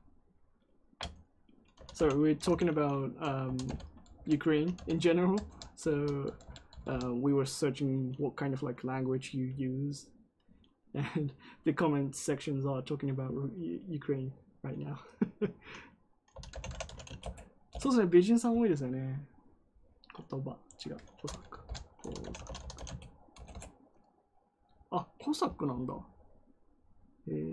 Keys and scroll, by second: 1.4-6.6 typing, 16.0-17.3 typing, 17.6 Return, 21.4-23.2 typing, 23.3 Return.